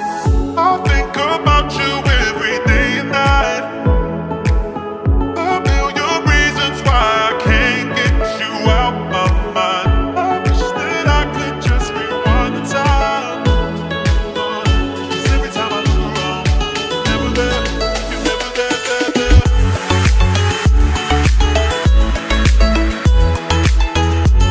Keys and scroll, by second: 0.0 Escape.